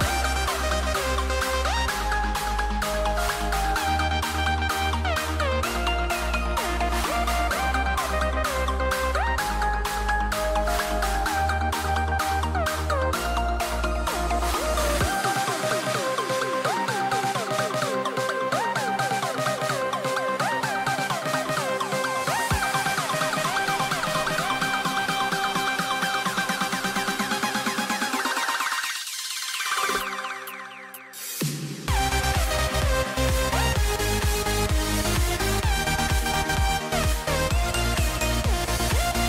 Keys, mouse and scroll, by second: 3.3 b, 20.9 e, 29.9-30.8 scroll up 4.